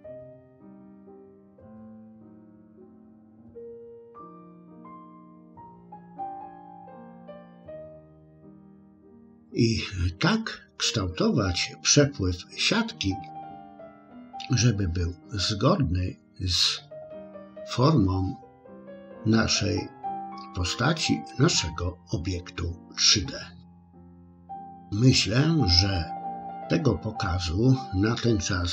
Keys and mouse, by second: 0.8 ctrl+r, 5.0 click, 5.7 click, 6.4 click, 7.3 click, 8.4 click.